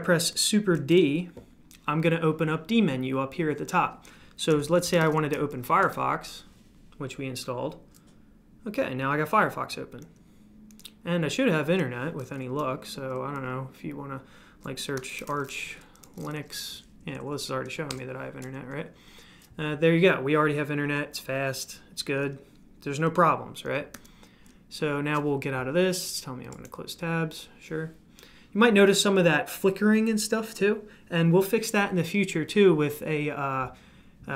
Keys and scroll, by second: 0.7 super+d, 4.5-5.5 typing, 5.8 Return, 14.5-16.5 typing, 17.1 Down, 17.9 Return, 23.9 super+q.